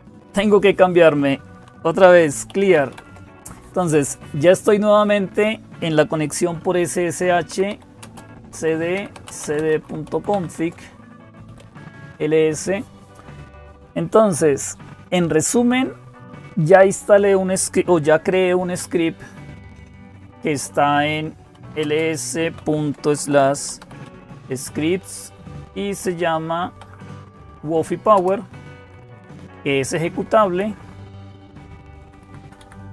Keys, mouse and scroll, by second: 0.0-32.9 typing, 26.8 Tab, 28.0 Return, 30.0 Up, 30.4 Left, 31.1 Left, 31.2-31.9 Left, 32.0 Left, 32.2 Left.